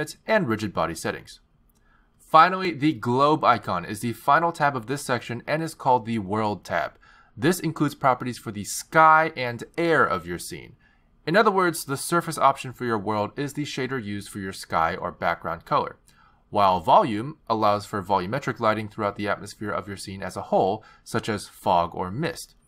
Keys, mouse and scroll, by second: 0.1 click, 1.9 click, 2.5 click, 4.7 click, 18.2 click, 19.5 click.